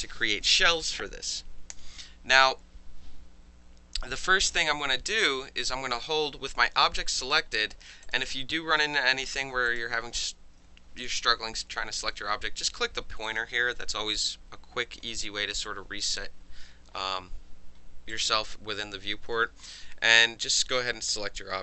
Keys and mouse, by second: 8.0 click, 9.7 click, 13.2 click, 18.1 click, 19.7 click.